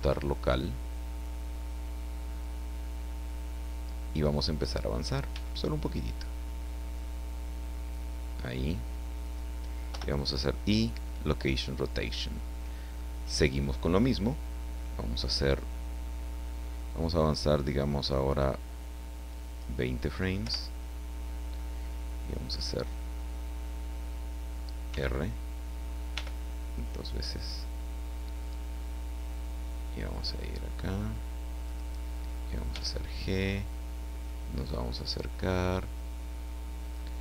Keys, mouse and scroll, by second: 4.2 click, 5.3 g, 5.4 middle click, 9.2 click, 9.9 i, 10.8 click, 19.3 click, 20.4 Left, 24.9 r, 26.2 r, 31.6 click, 32.7 g, 32.9 middle click, 36.8 click.